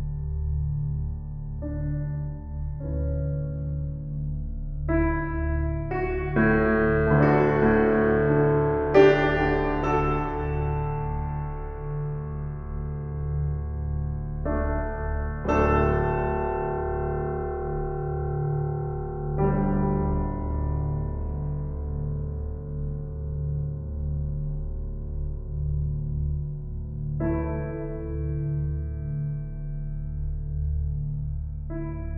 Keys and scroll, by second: 2.1 s, 6.5 shift+s, 9.3 shift+s, 10.9 z, 14.3 shift+s, 18.6 shift+s, 22.2 shift+s, 29.5 s.